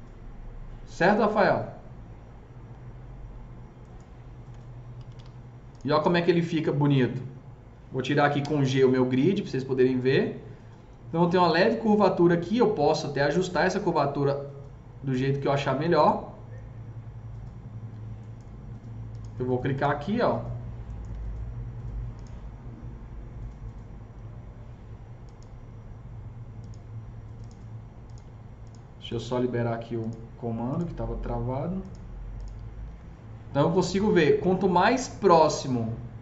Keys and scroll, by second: 4.9 F3, 5.0 F4, 8.3 g, 21.0 F3, 32.9 F3.